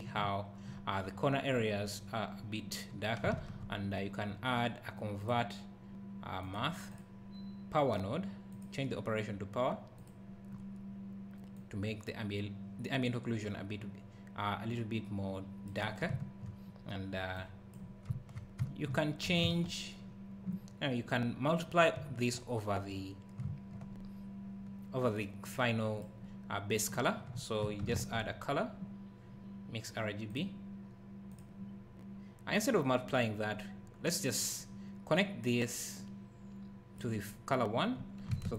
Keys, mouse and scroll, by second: 3.4 shift+a, 7.0 click, 10.6-11.6 scroll up 1, 11.6 click, 16.1 `, 17.4 click, 17.4 click, 18.1 `, 19.4 shift+a, 25.5 click, 27.9 shift+a, 31.4 click.